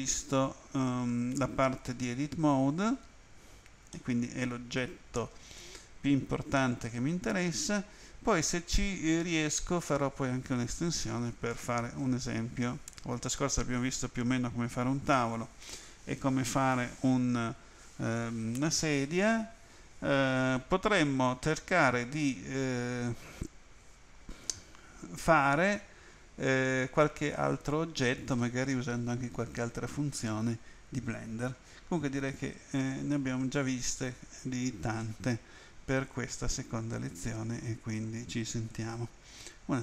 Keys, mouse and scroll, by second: 0.6 scroll down 2, 4.0 middle click.